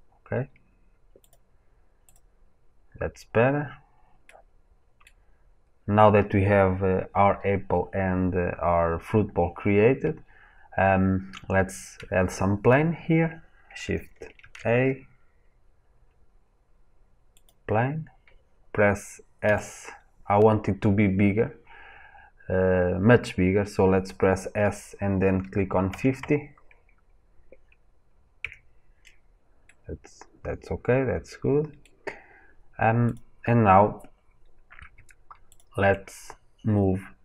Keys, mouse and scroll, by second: 2.7 scroll down 1, 4.2-10.4 middle drag, 10.4 scroll down 1, 12.2 scroll up 1, 14.3 shift+a, 14.4-19.3 middle drag, 19.3 s, 23.3-26.1 drag, 28.0 middle click, 28.3-33.0 middle drag, 33.0 click, 35.4 shift+click.